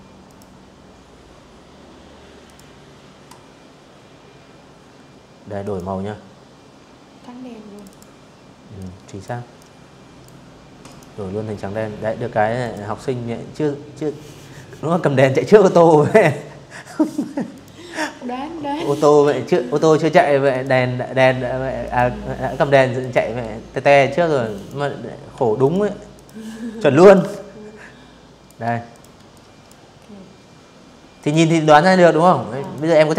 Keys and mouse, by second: 0.1 click, 3.3 click, 5.4 click, 5.5 click, 6.4 click, 7.2 click, 8.5 click, 10.3 click, 13.8 click, 15.2 click, 16.7 click, 18.2 click, 19.5 click, 20.6 click, 22.2 click, 23.0 v, 23.3 click, 23.8 click, 24.8-26.1 shift+drag, 26.6 click, 27.0 click, 28.8 click, 30.3 click, 31.2 click, 31.7 click, 32.3-33.1 typing, 32.4 click.